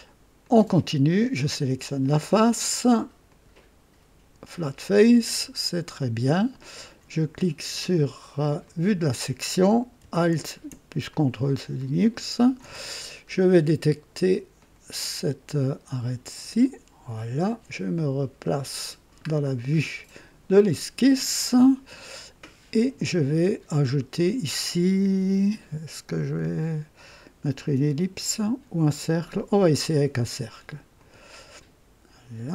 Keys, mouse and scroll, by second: 0.4 click, 3.2 click, 4.3 typing, 5.2 click, 8.6 click, 11.1-12.5 drag, 12.9 ctrl+alt+scroll up 1, 14.5 click, 16.3 click, 18.4 click, 19.5 scroll up 2, 30.9 click.